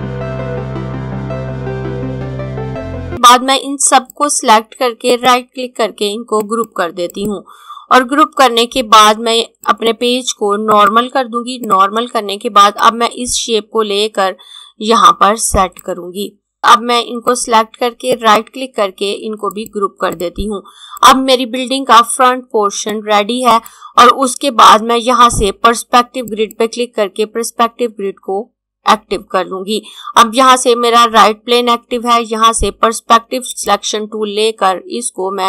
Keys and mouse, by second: 0.4 click, 1.5 click, 2.0 click, 5.1 right click, 6.4 click, 9.5 click, 18.1 right click, 19.4 click, 26.3 click, 33.4 click.